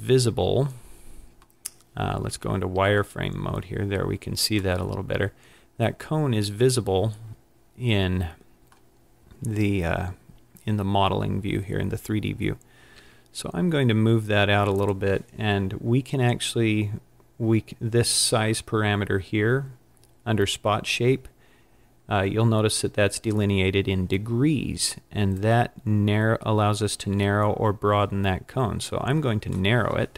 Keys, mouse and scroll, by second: 2.3 z, 2.9-3.8 scroll down 5, 3.8-4.8 scroll down 2, 4.8 middle click, 10.5-11.4 scroll down 3, 11.4 scroll up 3, 13.0 g, 14.7 scroll up 1, 14.9 click, 25.4 click, 25.7 click.